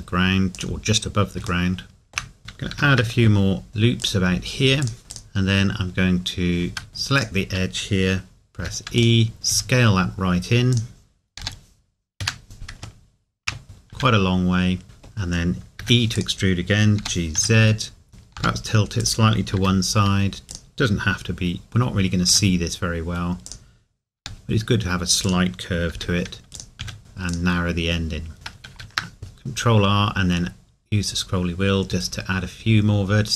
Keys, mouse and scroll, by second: 0.5 click, 1.7 shift+middle click, 2.4 Tab, 2.7 ctrl+r, 4.0 click, 5.0 scroll up 1, 5.1 click, 8.5 e, 9.0 click, 9.5 s, 10.7 click, 12.2 Escape, 13.0 shift+middle click, 13.6 scroll up 1, 13.9 s, 14.8 middle click, 17.0 g, 18.1 click, 18.3 g, 19.0 click, 19.6 r, 20.5 click, 23.5 click, 24.2 g, 25.3 click, 25.9 r, 26.5 click, 26.8 s, 27.3 click, 28.7 ctrl+r.